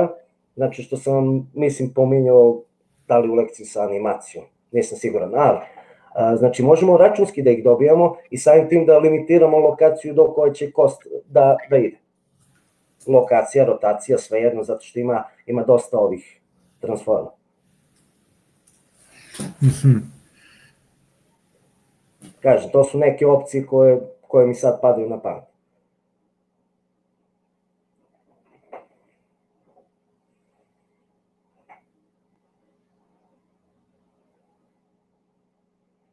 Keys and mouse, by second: 15.1-27.2 drag.